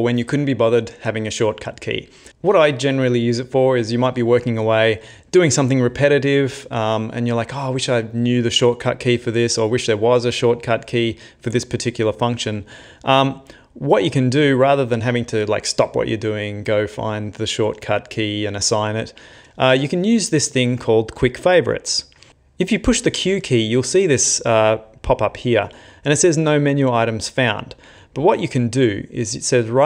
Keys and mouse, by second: 23.3 q.